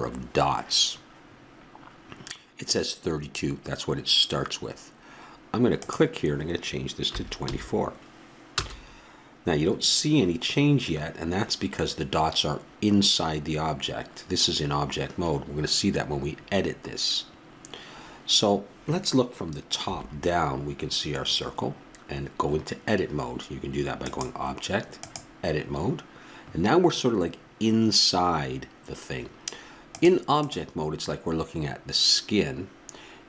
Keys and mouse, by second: 5.8-7.5 drag, 19.9 KP_7, 24.0-24.6 drag, 25.5 click, 25.7 click, 29.9-31.7 drag.